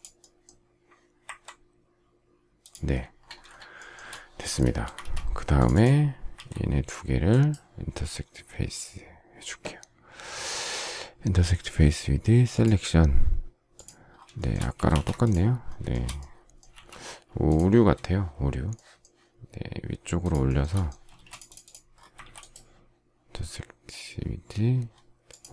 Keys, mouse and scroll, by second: 3.4 shift+scroll, 3.7 shift+middle click, 4.7 space, 4.8 Escape, 6.3 ctrl+a, 14.3 shift+middle click, 14.7 space, 14.8 Escape, 15.8 shift+middle click, 16.6 m, 18.6 shift+middle click, 20.1 shift+click, 20.4 shift+middle click, 20.5 shift+double middle click, 21.0 space, 22.1 ctrl+a.